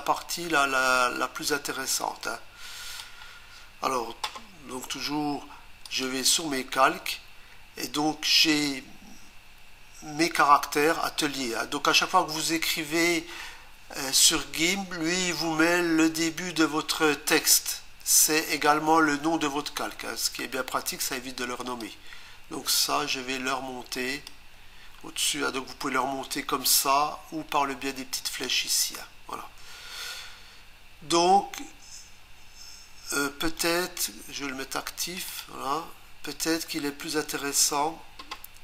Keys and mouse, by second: 1.0 click, 5.9 click, 21.8 click, 28.5 click, 35.0 click, 35.3 click, 35.4 double click.